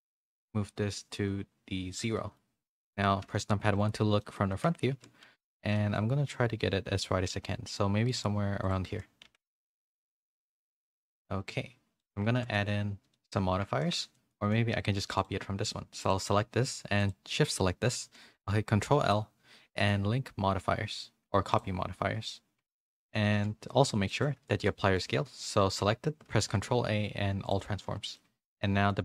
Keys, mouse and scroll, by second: 0.0 click, 2.1 middle click, 3.1 KP_1, 4.2 shift+middle click, 4.5 Tab, 4.9 z, 5.2 a, 5.7 s, 8.9 z, 9.2 Tab, 9.5 a, 9.8 middle click, 9.8 a, 10.8 a, 11.0 a, 11.2 middle click, 12.3 middle click, 12.5 middle click, 13.8 shift+middle click, 14.1 middle click, 18.9 ctrl+l, 22.7 shift+middle click, 23.1 a, 23.3 a, 24.1 shift+middle click, 24.5 ctrl+a, 27.5 ctrl+a, 28.0 a, 28.1 middle click.